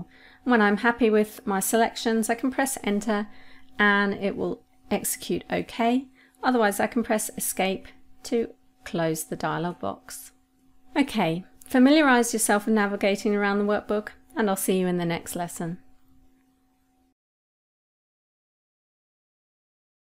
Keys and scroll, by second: 3.1 Return, 7.2 Escape.